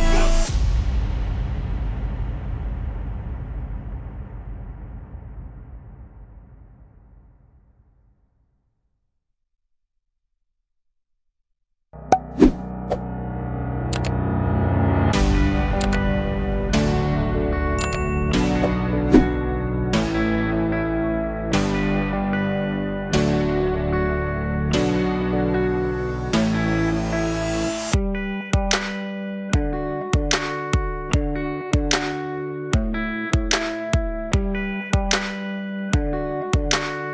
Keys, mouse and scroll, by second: 2.8 ctrl+shift+click, 6.0 click, 6.1 shift+a, 9.5-11.7 drag, 12.6 click, 13.3-15.8 drag, 16.6-19.1 drag, 20.1-22.0 drag, 22.0-22.3 scroll down 1, 22.3-22.9 middle drag, 22.9-24.3 drag, 24.3 shift+a, 30.5-35.9 drag, 35.9 middle click, 36.3-36.8 scroll up 1, 36.8 click.